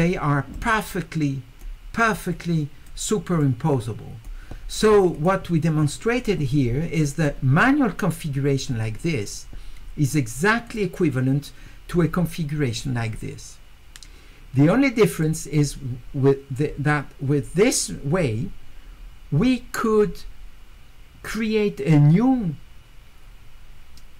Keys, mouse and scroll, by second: 0.5-1.6 right drag, 2.1 click, 3.4 right click, 5.1 click, 7.2 click, 10.7 click, 15.2 click.